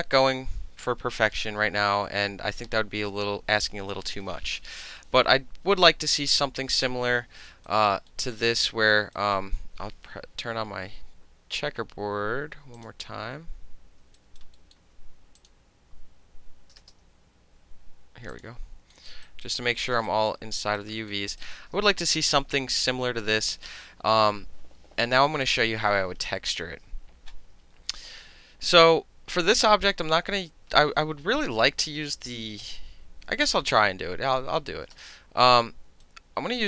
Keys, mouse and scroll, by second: 6.3-7.7 middle drag, 7.7 alt+click, 7.9 alt+middle click, 8.4 alt+middle click, 9.2 alt+right click, 12.8 click, 14.2 alt+right click, 14.6 alt+middle click, 15.4 click, 16.8 space, 18.3 click, 19.1 alt+middle click, 19.3 alt+right click, 19.5 alt+middle click, 19.9 alt+middle click, 20.1 alt+right click, 20.3 alt+middle click, 20.6 alt+right click, 20.8 alt+middle click, 21.1 alt+middle click, 21.4 alt+click, 35.0 space, 36.0 right click, 36.3 click.